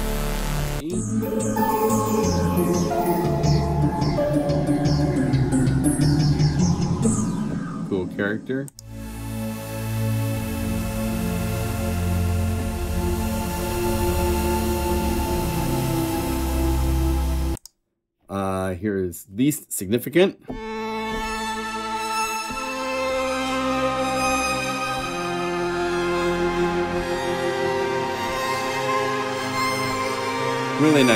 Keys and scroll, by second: 2.1 F2, 2.5 F3, 2.8 F4, 3.0 F3, 6.6 F2, 6.8 F2, 10.3 F2, 10.3 F3, 12.5 F4.